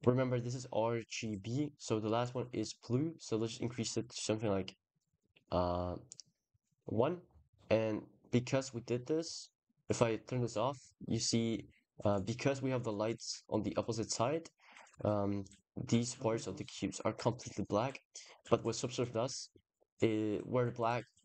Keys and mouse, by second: 1.6 click, 2.8-5.0 drag, 9.6 click.